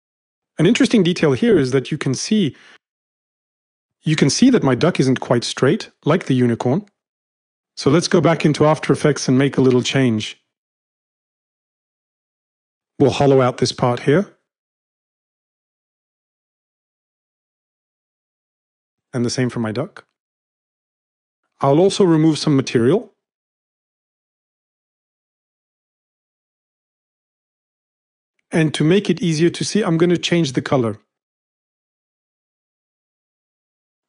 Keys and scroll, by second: 12.0-12.9 typing, 16.8 space, 16.9 space, 17.0 space, 17.5 m, 18.7 space, 18.8 space, 18.9 space, 18.9 space, 22.4 space, 22.8 space, 22.9 space, 23.0 space, 24.9 ctrl+z, 27.5 m.